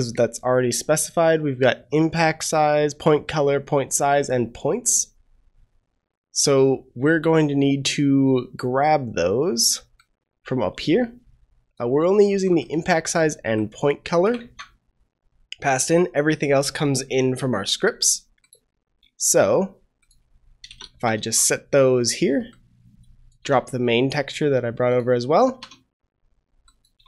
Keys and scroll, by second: 14.4 ctrl+c, 20.9 ctrl+v, 21.1 ctrl+s.